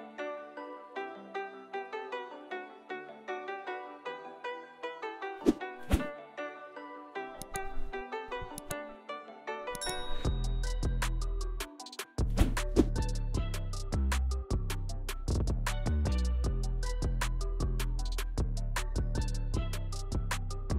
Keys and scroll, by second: 0.4 k, 2.9 shift+x, 3.8 shift+x, 6.8 shift+x, 7.3 ctrl+z, 7.5 shift+x, 8.5 alt+q, 9.9 alt+q, 11.0 shift+x, 14.1 g, 15.3 g, 15.8 g, 16.1 g, 16.5 g, 19.0 j.